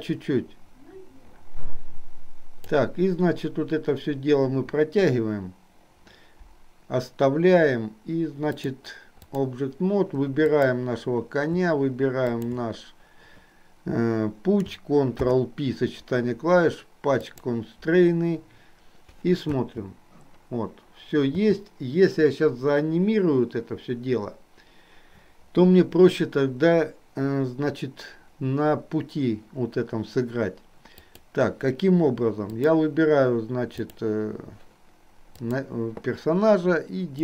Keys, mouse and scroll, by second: 8.5-9.6 drag, 10.5 click, 12.4 shift+click, 15.2 ctrl+p, 19.6 space, 21.5 space, 31.1 click, 32.5 click, 35.5 click.